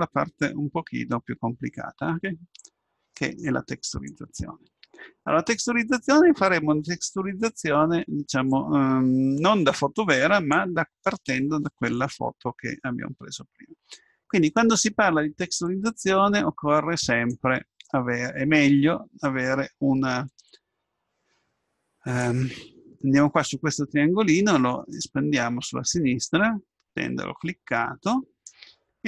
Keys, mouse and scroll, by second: 6.8-9.6 middle drag, 25.0-26.9 drag.